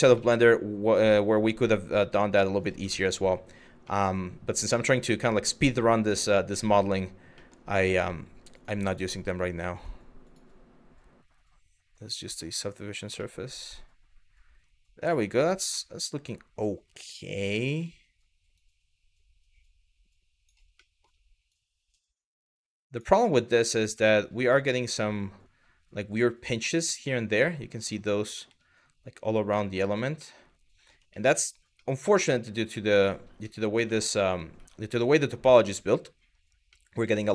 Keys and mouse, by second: 1.0 click, 2.6 shift+middle click, 3.6 middle click, 4.9 click, 6.5 Tab, 7.0 middle click, 8.2 click, 8.4 click, 9.4 click, 9.9-12.3 drag, 12.9-14.4 middle drag, 14.7 middle drag, 15.4 shift+middle drag, 17.3 Tab, 18.3 click, 20.5 middle click, 21.2 click, 23.0 middle click, 23.7 middle click, 24.0 Tab, 24.7-25.1 middle drag, 25.9-26.2 middle drag, 26.8-27.4 middle drag, 28.1 middle drag, 29.3 middle drag, 29.9-30.5 middle drag, 30.8 shift+middle drag, 31.5 middle click, 32.6 middle click, 32.9 Tab, 33.6 middle click, 34.2 Tab, 34.5 middle drag, 35.6 middle drag, 36.3 middle drag.